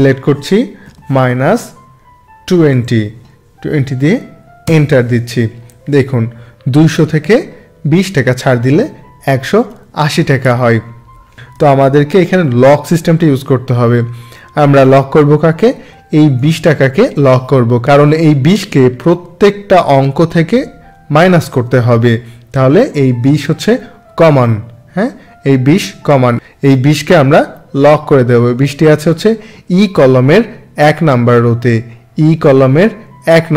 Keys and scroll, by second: 4.6 Return, 11.5 ctrl+z.